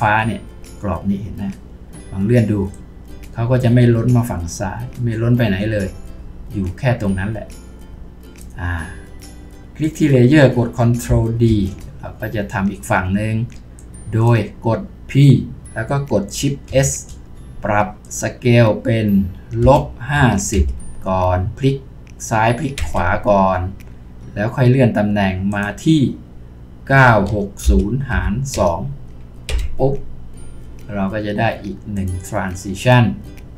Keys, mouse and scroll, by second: 11.5 ctrl+d, 15.6 typing, 19.6-20.5 typing, 22.8 Return, 26.9-28.6 typing, 29.5 Return.